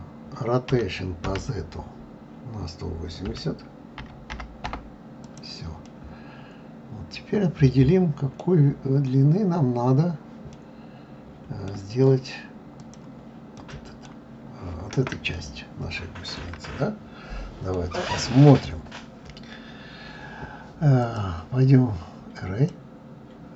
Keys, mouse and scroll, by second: 5.3 click, 5.8-8.8 middle drag, 10.5-12.7 middle drag, 12.7 click, 13.6-14.3 middle drag, 14.3-15.3 scroll up 4, 15.3-19.7 shift+middle drag, 21.0-23.5 drag.